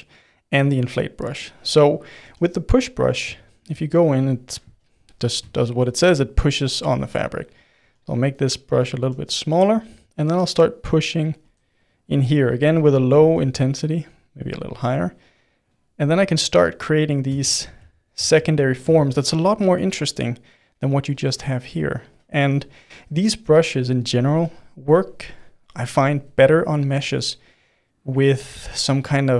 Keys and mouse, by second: 1.3 click, 1.8 middle click, 2.2 f, 3.0-6.9 middle drag, 6.9 f, 7.8 f, 8.7 middle click, 9.0 f, 10.1-11.4 drag, 11.4 f, 12.0-13.2 drag, 13.2 shift+f, 14.4-16.4 drag, 16.4 middle click, 17.4 ctrl+z, 17.8 ctrl+z, 18.1 ctrl+z, 18.5 middle click, 18.9 ctrl+z, 19.8-21.1 middle drag, 21.1-25.5 drag, 25.5-28.1 middle drag, 28.1 click, 29.1 middle click.